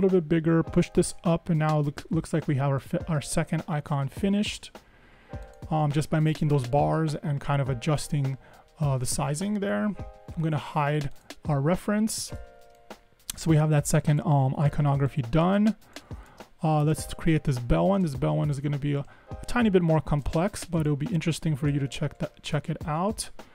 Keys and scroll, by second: 0.8 Up, 1.1 Up.